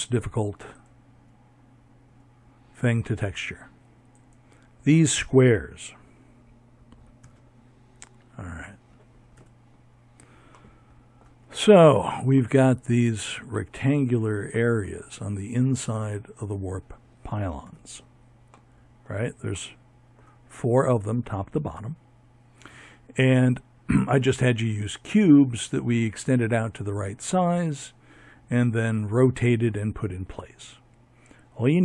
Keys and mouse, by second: 0.0 Escape, 5.1 ctrl+KP_3, 7.2 z, 11.8-15.5 middle drag, 15.5 z, 16.4 middle click, 22.6 middle click.